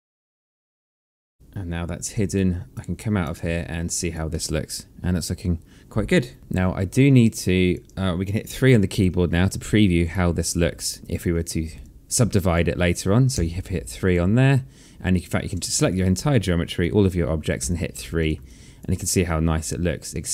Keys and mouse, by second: 0.4 click, 0.5-1.4 typing, 1.1 click, 2.8 right click, 3.7 click, 4.4 alt+click, 4.8 alt+middle click, 5.2 alt+click, 6.9 alt+click, 10.5 click, 11.0 1, 13.8 3, 14.3 alt+click, 15.7 click, 16.4 alt+click, 18.1 3, 18.7 click, 19.0 alt+click.